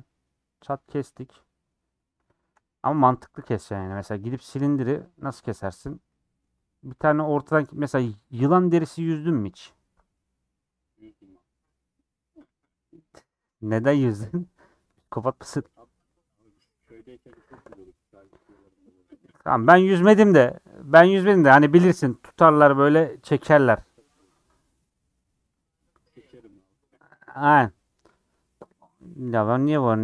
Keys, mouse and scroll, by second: 0.5-30.0 middle drag.